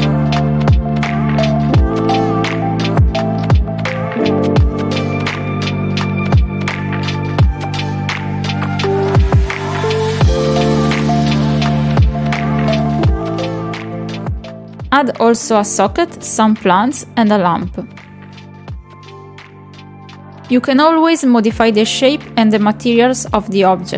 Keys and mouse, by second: 0.0 KP_Decimal, 0.3 click, 1.5 click, 1.6 click, 1.7 click, 1.9 click, 2.0 click, 2.2 click, 3.9 middle click, 4.1 shift+middle click, 4.5 click, 5.8 click, 7.2 click, 7.3 click, 10.1 click, 12.9 click, 14.8-15.3 middle drag, 15.8 click, 16.6 click, 18.9 middle click, 19.2 middle drag, 19.5 drag, 19.7 click, 20.8 click.